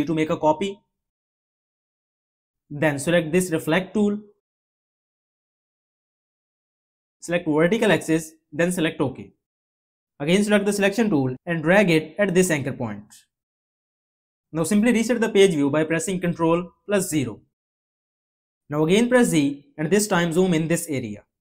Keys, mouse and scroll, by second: 16.6 ctrl+0, 19.2 z.